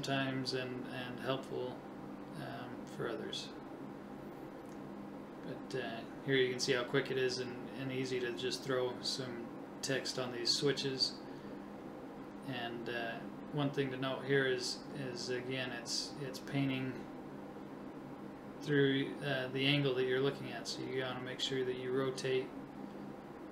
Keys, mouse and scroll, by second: 3.6 right click, 4.6 KP_1, 11.4 KP_7, 12.9 KP_1, 14.2 click, 15.1-17.5 right drag.